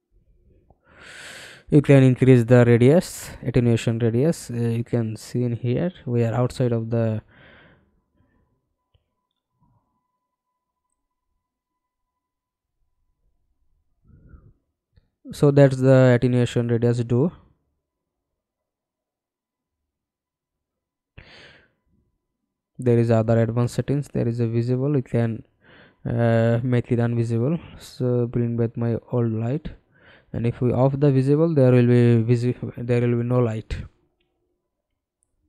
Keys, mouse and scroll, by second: 2.3-4.0 scroll down 13, 4.0-4.4 scroll down 1, 4.9-8.3 scroll down 2, 8.3 scroll down 1, 9.0-10.8 scroll up 21, 13.1-14.6 scroll down 3, 18.0-19.3 scroll down 2, 20.4-22.4 scroll down 2, 22.4-25.3 scroll down 1, 25.3 scroll down 1.